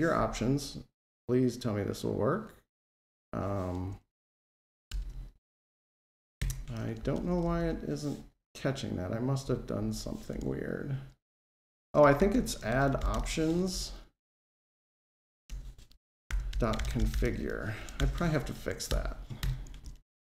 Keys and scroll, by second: 0.0 super+v, 4.7 alt+Return, 13.4 Escape, 18.7 Delete, 19.2 Escape.